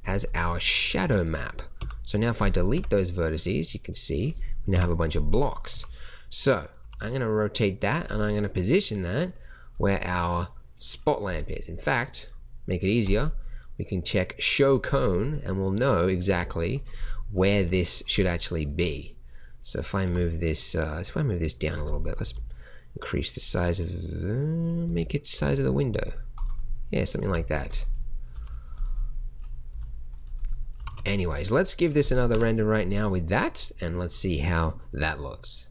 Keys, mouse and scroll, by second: 1.7 x, 2.7 Tab, 4.7 KP_1, 5.7 r, 6.8 g, 16.3 g, 17.5 s, 20.0 g, 22.2 s, 24.8 s, 25.3 g, 26.5-27.2 middle drag, 27.2 g, 28.3 g, 29.6 s, 30.7 g, 32.3 KP_0.